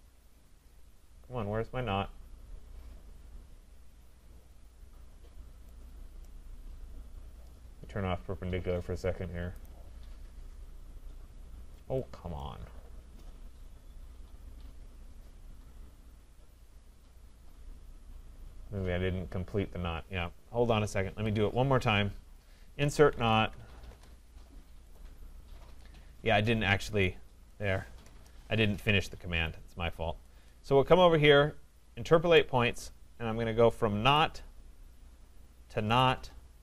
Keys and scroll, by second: 21.0 Escape, 23.9 Return.